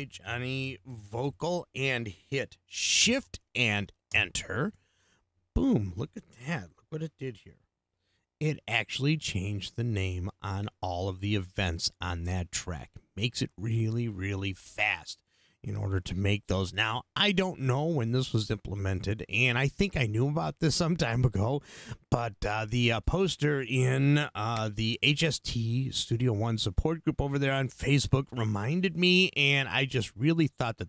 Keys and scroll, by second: 0.0-1.7 typing, 4.1 shift+Return, 7.8 ctrl+2.